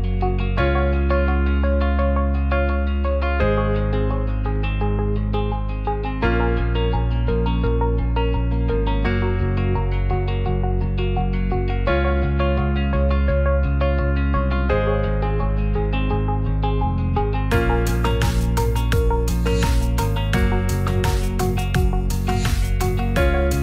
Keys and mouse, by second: 2.5 click, 3.8-5.2 drag, 9.1 click, 14.8-16.5 drag, 16.8-18.2 drag, 21.3 click, 22.0 middle click, 23.0 middle click.